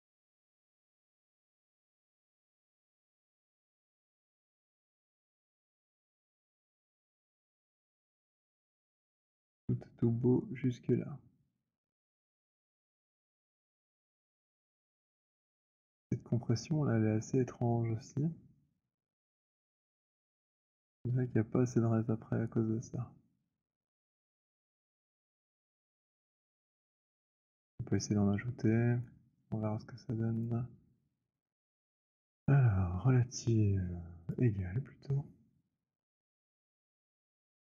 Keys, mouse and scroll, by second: 0.4 alt+right click, 1.2 middle click, 2.7 alt+click, 5.2 alt+click, 5.4 alt+click, 6.2 alt+middle click, 6.4 alt+middle click, 9.1 alt+click, 25.6 right click, 27.1 w, 29.1 shift+right click, 30.3 right click, 34.4 right click.